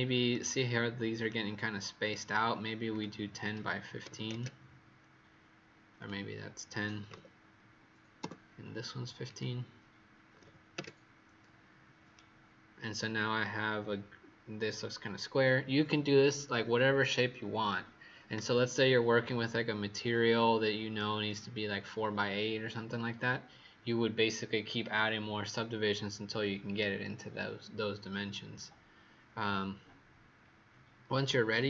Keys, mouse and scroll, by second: 2.8 click, 3.9 KP_1, 4.0 KP_5, 4.2 KP_Enter, 5.9 click, 6.9 KP_1, 7.0 KP_0, 8.1 Return, 9.2 click, 10.3 KP_1, 10.7 KP_Enter, 10.7 KP_5, 12.1 right click.